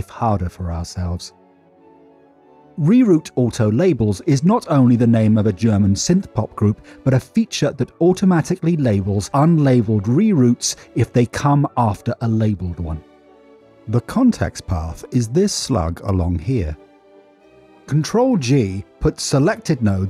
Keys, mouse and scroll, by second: 19.0 drag.